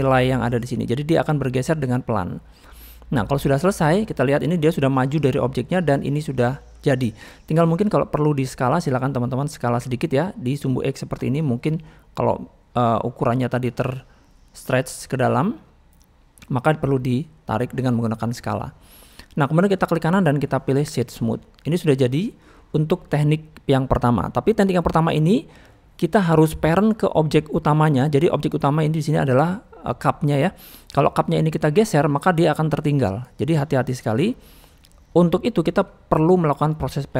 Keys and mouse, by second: 1.0 middle click, 2.8 drag, 3.0-4.4 middle drag, 4.9-5.3 middle drag, 5.7-6.5 middle drag, 7.1-8.4 middle drag, 9.4 click, 10.9 click, 11.1-13.0 drag, 13.4 middle click, 14.6 click, 15.5 middle click, 19.0-19.5 middle drag, 21.4-22.0 middle drag, 22.6 middle drag, 24.3 middle click, 25.0 middle click, 28.8 middle click, 31.7-37.1 drag.